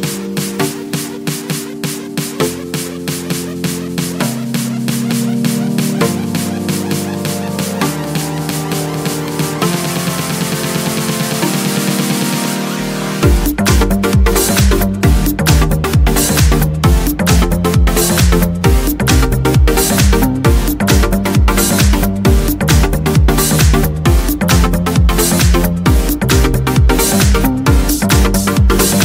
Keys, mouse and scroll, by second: 0.0-0.4 scroll up 1, 0.4 scroll down 1, 0.6-1.2 scroll up 1, 1.2-4.0 drag, 4.2 click, 5.5 click, 6.4-7.0 scroll down 1, 7.0-7.4 scroll up 1, 7.7 click, 8.6 0, 9.9-10.3 scroll down 1, 10.8-11.1 scroll up 1, 11.3-12.7 middle drag, 12.7 click, 13.1 click, 17.7 1, 19.1-20.2 drag, 19.1 2, 20.3 3, 21.4 4, 22.4 5, 23.3 6, 24.9 0, 28.2 click.